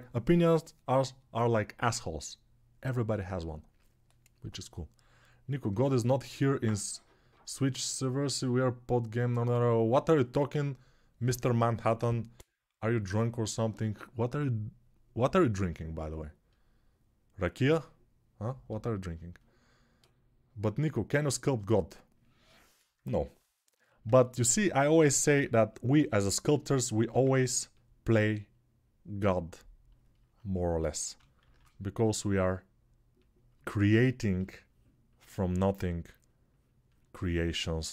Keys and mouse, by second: 25.1 alt+q, 26.9 ctrl+alt+click, 27.1-34.1 alt+right drag, 31.2 shift+r, 33.7 ctrl+r, 34.1-37.9 shift+drag.